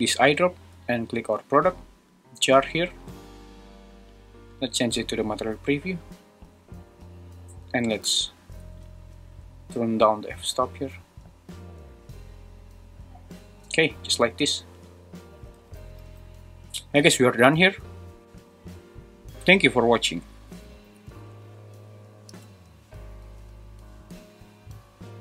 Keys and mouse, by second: 8.8-13.8 shift+drag, 15.9 shift+super+Right, 16.2 super+s.